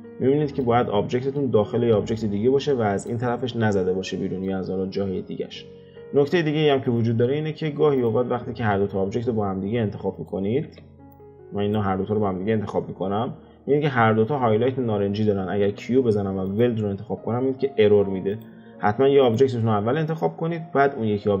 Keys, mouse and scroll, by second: 0.3-1.7 shift+middle drag, 1.7-2.7 scroll up 1, 2.7-5.4 middle drag, 5.4 scroll down 4, 6.4-8.0 shift+middle drag, 8.0 click, 8.6 x, 10.1 click, 10.6 x, 11.1 click, 15.6 q, 18.3 click, 18.6-19.2 scroll up 4, 19.2 click, 19.6-21.4 scroll down 3.